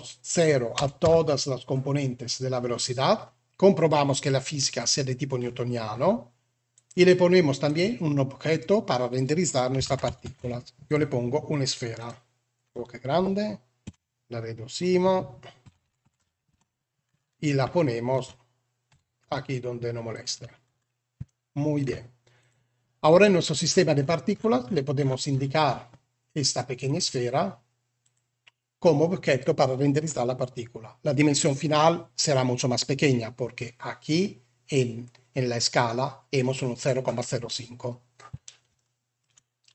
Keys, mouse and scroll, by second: 0.2 click, 6.7-7.7 drag, 9.8 alt+a, 13.8 Tab, 15.5 s, 16.4 Tab, 17.7 shift+middle click, 18.8 g, 21.2-21.7 shift+middle drag, 22.3 click, 26.8 click, 38.6-39.1 shift+middle drag.